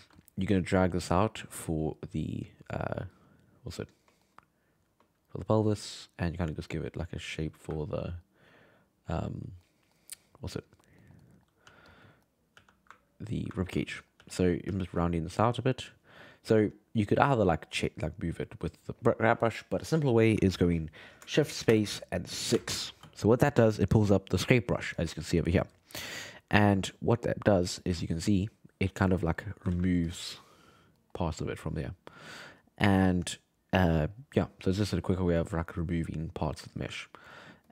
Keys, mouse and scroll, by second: 0.6-4.2 drag, 4.2-5.7 shift+middle drag, 5.7-7.8 drag, 7.8-11.6 ctrl+middle drag, 11.6 f, 12.0 middle click, 12.5 f, 13.6 ctrl+middle click, 14.2 f, 14.7 f, 15.2 click, 15.4 right click, 17.2-21.0 drag, 21.7 shift+space, 26.6 ctrl+middle click, 27.4 f, 28.4 click, 29.3 middle click, 29.7 ctrl+z, 30.1 click, 31.0 middle click, 31.7-32.9 drag, 32.9-35.0 middle drag, 35.0-36.2 drag, 36.2 middle click, 36.7-37.7 drag.